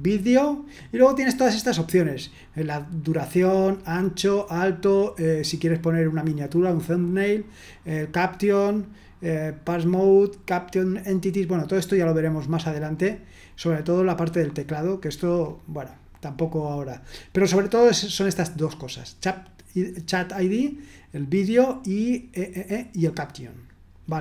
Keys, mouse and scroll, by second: 7.3-9.0 scroll down 1, 9.0-11.5 scroll down 1, 11.5-12.9 scroll down 1, 12.9 scroll up 1, 13.0-14.3 scroll down 3, 14.3-15.0 scroll down 1, 15.0-16.9 scroll up 4, 16.9-21.3 scroll down 2, 21.3-24.2 scroll down 2.